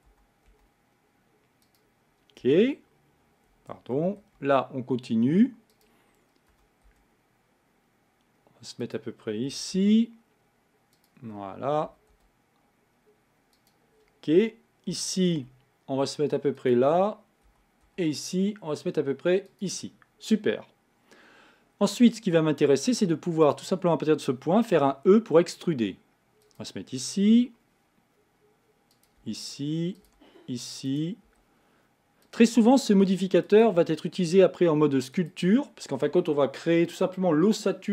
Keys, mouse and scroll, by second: 0.1 e, 2.4 z, 4.0 e, 6.5 e, 9.5 e, 11.9 e, 14.9 e, 17.5 e, 23.4 click, 24.8 e, 27.3 e, 29.2 e, 30.1 e, 31.3 e, 32.6 e, 33.8 e.